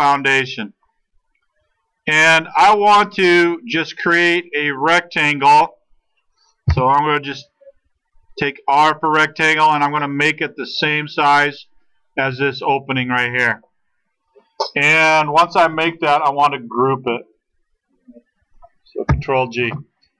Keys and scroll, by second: 6.7 r, 15.8 space, 19.1 ctrl+g.